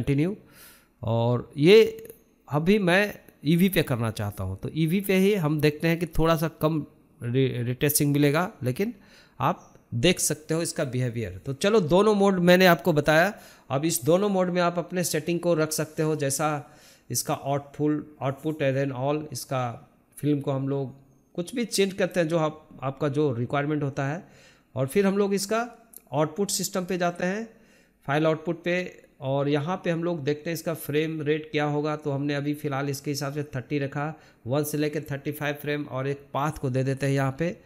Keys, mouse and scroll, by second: 12.9-14.7 scroll up 1, 14.7-15.1 scroll up 1, 15.1-19.9 drag, 19.9-20.6 scroll down 1, 20.6-21.8 drag, 21.8-24.1 scroll down 1, 24.1-24.5 scroll down 1, 25.8-27.7 scroll up 10, 30.7 scroll down 1, 34.4 scroll down 1, 35.3-37.6 drag.